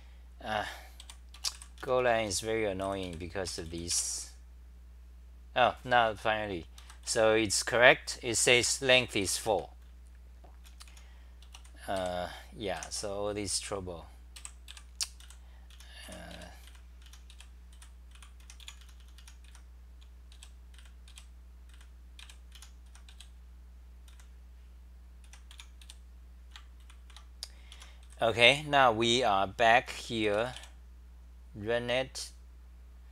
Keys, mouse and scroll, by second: 1.0 3, 2.0 t, 2.1 t, 2.8 r, 3.9 ;, 6.8 ctrl+g, 7.0 w, 8.5 super+=, 9.3-10.8 typing, 12.0 3, 14.1-24.1 typing, 25.3-26.3 typing, 27.0 ctrl+c, 27.7 Home, 29.6-30.4 typing.